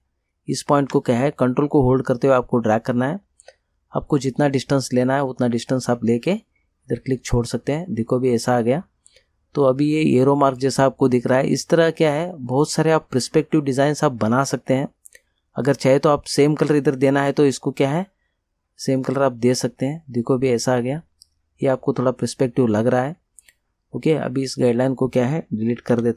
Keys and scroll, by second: 13.7 Return, 26.0 Delete.